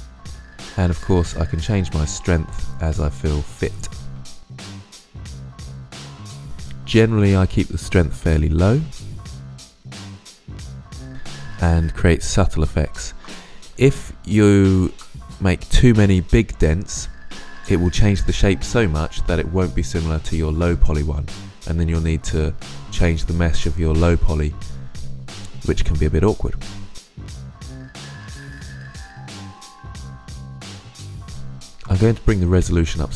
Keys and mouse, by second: 5.4-6.2 middle drag, 6.2-9.6 drag, 9.6-9.9 middle drag, 9.9-10.5 drag, 10.6-15.2 middle drag, 19.8-21.8 drag, 26.3-27.2 middle drag, 27.6-28.2 drag, 28.4 ctrl+z, 30.8 click, 31.0 middle drag.